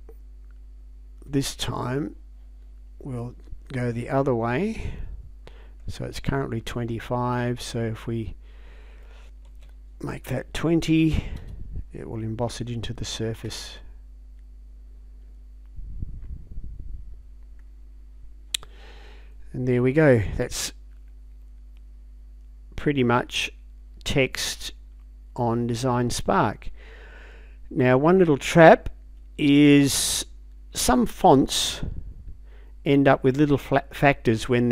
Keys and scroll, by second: 9.5 space, 11.0 2, 11.4 0, 13.5 Return.